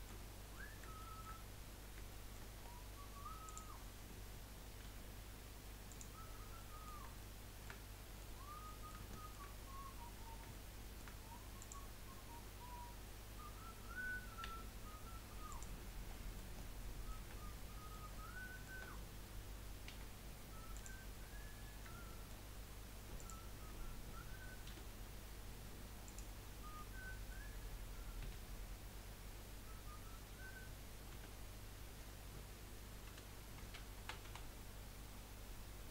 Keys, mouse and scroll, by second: 0.2-0.5 scroll up 3, 0.5 middle click, 1.5-2.1 scroll up 4, 2.1 shift+middle click, 2.5-2.8 scroll up 1, 3.4 click, 4.8 g, 6.2 scroll down 5, 6.6-9.5 middle drag, 9.5-10.5 scroll up 3, 10.5-11.6 shift+middle drag, 11.6 click, 14.4 g, 16.1 scroll down 1, 16.3-19.9 middle drag, 19.9 2, 20.7 click, 21.2-21.6 scroll down 3, 21.6-23.1 middle drag, 23.1 shift+click, 25.0 Delete, 26.7-28.2 middle drag, 28.2 1, 28.7 scroll up 1, 29.4-29.8 scroll down 2, 29.8-30.4 scroll up 1, 31.1 a, 33.2 F3.